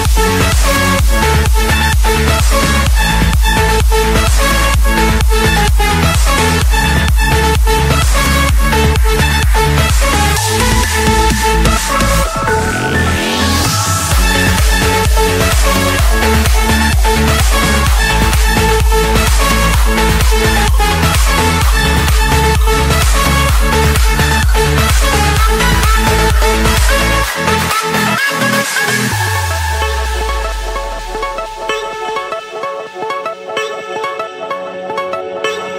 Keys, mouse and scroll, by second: 0.0 typing, 0.9 Return, 2.1-2.8 scroll, 2.8 click, 3.5 click, 4.5-5.0 typing, 5.6 Return, 7.0 click, 7.9 click, 9.5 click, 9.9 click, 10.8 m, 11.2 Return, 12.5 click, 13.4 click, 14.3 click, 14.3-15.3 middle drag, 15.3-16.7 typing, 17.4 Return, 19.2-20.3 drag, 19.9 Return, 21.5 click, 25.8-27.2 scroll, 29.6 click, 30.6 click, 31.5-32.5 drag, 33.7 typing, 35.1 5.